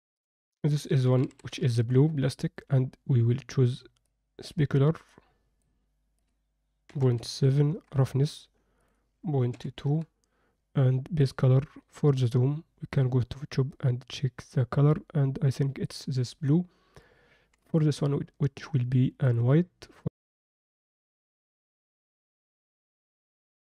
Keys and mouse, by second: 0.3-1.9 drag, 5.1 click, 6.2-7.7 drag, 8.8-9.9 drag, 11.2 click, 17.5 click, 19.3-23.6 drag.